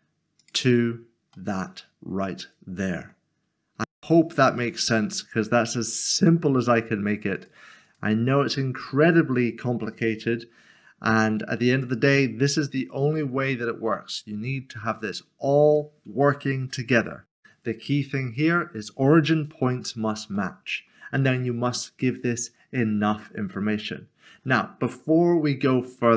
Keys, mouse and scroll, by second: 0.6 click, 1.5 middle click, 7.4 click, 8.8 g, 10.2 typing, 15.6 click, 16.6 ctrl+z, 17.3 click, 19.9 scroll up 1, 20.4 shift+middle click.